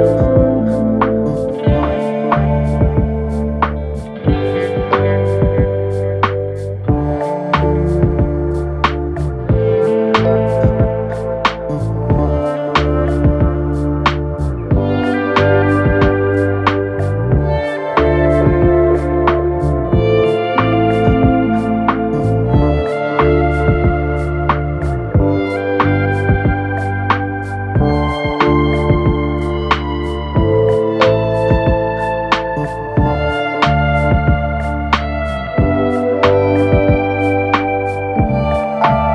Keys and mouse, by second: 2.6 Tab, 13.7-19.6 drag, 14.0 BackSpace, 16.7 BackSpace, 19.6-22.1 middle drag, 22.1-25.2 drag, 23.0 BackSpace, 25.2-39.1 middle drag, 27.7-32.3 drag, 28.0 BackSpace, 30.5 BackSpace, 36.6-39.1 drag.